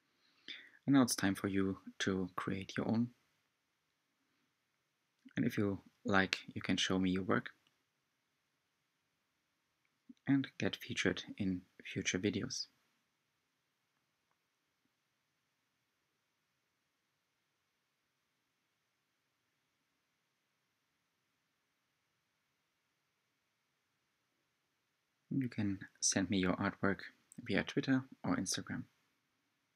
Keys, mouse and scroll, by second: 0.8-3.0 middle drag, 3.0 click, 4.1-7.2 middle drag, 7.3-9.8 middle drag, 9.8 click, 11.8 g, 22.2 click, 22.7-23.8 middle drag, 23.8 Tab, 24.5-25.1 middle drag, 25.1 click, 26.3-29.2 middle drag.